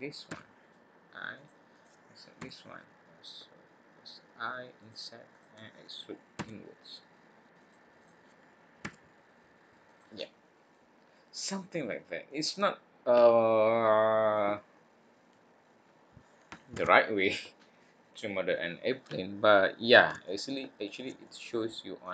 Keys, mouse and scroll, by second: 0.3 i, 1.7 click, 2.4 i, 5.3 click, 6.3 e, 7.9 click, 8.8 e, 10.2-10.7 scroll down 2, 10.7 middle click, 11.6-12.2 scroll down 1, 12.2 middle click, 15.6 scroll up 1, 16.7 alt+a, 20.2 shift+middle click.